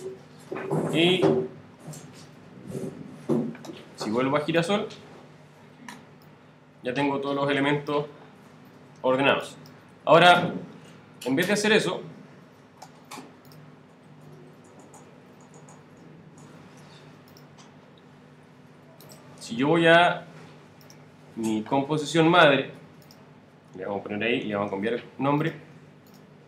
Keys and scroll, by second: 9.9 super+z, 14.6 super+z.